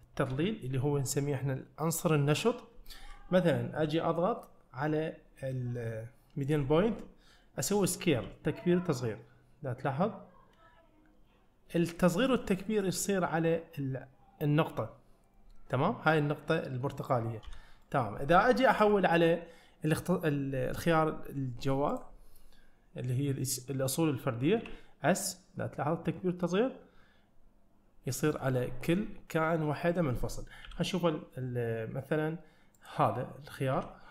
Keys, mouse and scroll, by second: 33.8 ..